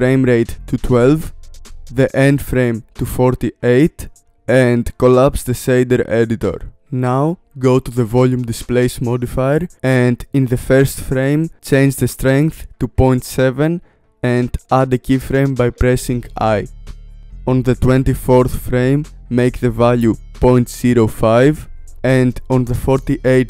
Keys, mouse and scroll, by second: 1.7-6.7 drag, 12.0 click, 12.7 click, 18.2 click, 19.1 click, 22.5-23.4 drag.